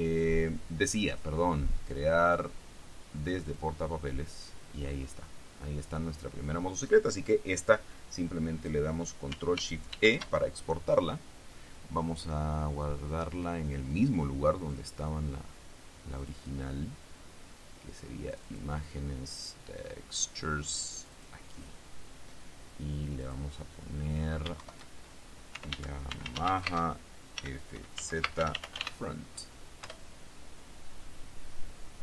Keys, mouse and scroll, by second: 1.2 click, 3.6 click, 10.1 ctrl+shift+e, 14.8 click, 16.4 click, 18.4 click, 20.0-20.6 scroll down 1, 21.1 click, 23.4 click, 24.8 shift+Home, 25.4-29.5 typing, 30.0 Return.